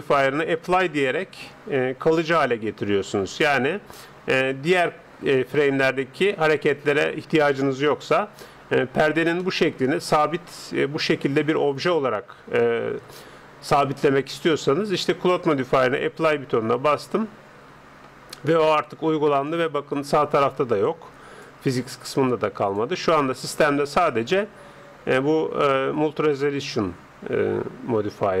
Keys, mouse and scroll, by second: 9.4-11.3 middle drag, 13.8-15.5 middle drag, 15.9-17.6 drag, 19.3-22.5 drag, 22.6-24.4 drag, 26.5-28.4 middle drag.